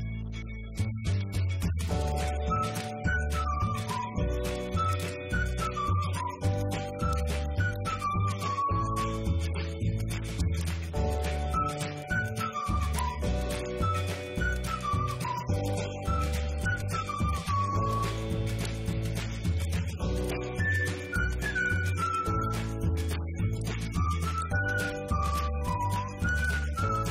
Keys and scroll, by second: 0.0-1.2 typing, 1.6 Left, 2.6 Right, 3.2 shift+Left, 4.8 Right, 5.1 Left, 5.9 Right, 6.5 shift+Left, 20.8 Delete, 21.6 ctrl+Up, 22.1 Right, 22.5 Down, 23.7 ctrl+c, 24.1 Left, 25.3 ctrl+v, 25.8 Right, 26.0 Left.